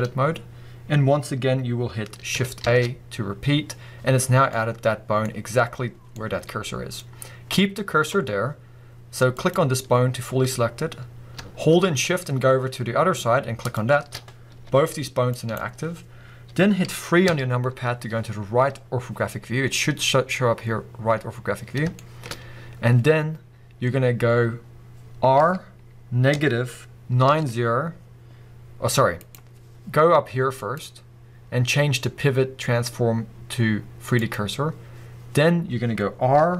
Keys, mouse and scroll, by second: 2.6 shift+a, 4.5-9.3 middle drag, 9.3 click, 13.6 shift+click, 14.6 g, 15.6 right click, 17.3 KP_3, 22.0-29.3 shift+middle drag, 22.4-23.7 scroll up 2, 23.7-25.4 scroll up 1, 25.4 r, 29.3 right click, 30.6-36.5 drag, 36.4 r.